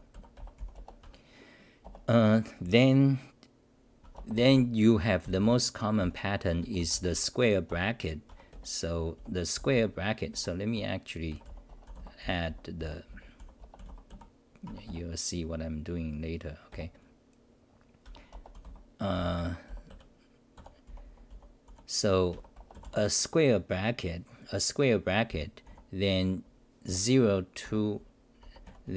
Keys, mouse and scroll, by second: 0.0-0.3 typing, 1.0 Home, 1.8 Return, 4.0 Home, 5.7-7.3 typing, 8.3 Home, 8.5-14.8 typing, 10.7 Home, 14.6 Home, 18.0-22.2 typing, 22.3 Home, 25.7 u, 28.4 Home, 28.6-28.9 typing.